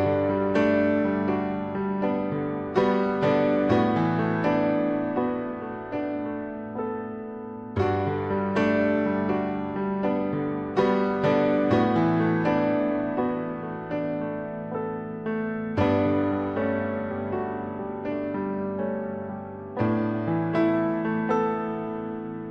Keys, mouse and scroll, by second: 0.0 click, 0.2 click, 0.6 click, 1.7 click, 2.0-3.3 drag, 3.9 click, 4.7 middle click, 5.4 click, 6.0 middle click, 6.5-7.6 drag, 7.8 click, 7.9 middle click, 8.0 click, 8.2 click, 8.7 ctrl+click, 9.3 ctrl+click, 9.6 click, 10.4 click, 11.0 click, 11.5 middle click, 11.8 click, 12.4 middle click, 12.9 click, 13.3 click, 13.7 middle click, 14.3 click, 15.6 click, 16.3 click, 16.7 click, 17.4 click, 17.9 click, 18.4 click, 18.9 click, 19.4 click, 20.3 click, 20.7 ctrl+click, 21.4 click, 22.0 click.